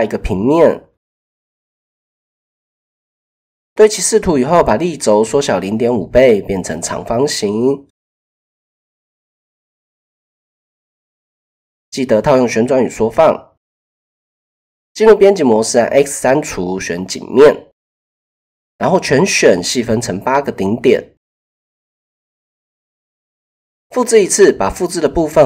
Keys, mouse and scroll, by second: 1.9-2.5 drag, 4.8 shift+middle drag, 6.1 s, 7.7-8.9 drag, 10.8 ctrl+a, 12.9 Tab, 14.6 x, 18.0 a, 18.6-19.5 drag, 21.2 KP_1, 22.2 shift+click, 23.0 shift+click, 23.9 shift+d, 24.8 click.